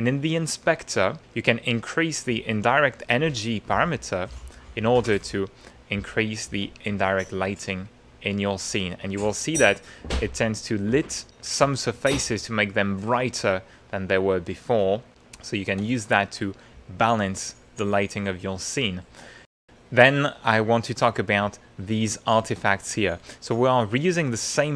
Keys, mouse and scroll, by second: 3.9-11.3 drag, 14.4 click, 15.2 ctrl+click, 15.4 ctrl+middle click, 16.0-17.2 ctrl+middle drag, 17.4-19.4 middle drag, 20.5 middle click, 20.9 click, 21.9 ctrl+middle click, 22.7 ctrl+middle click, 24.4-24.7 middle drag.